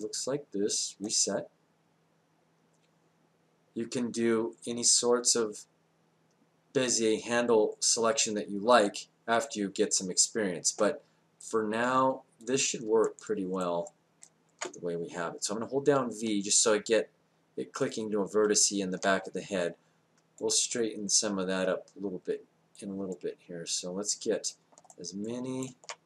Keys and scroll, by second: 16.0 v.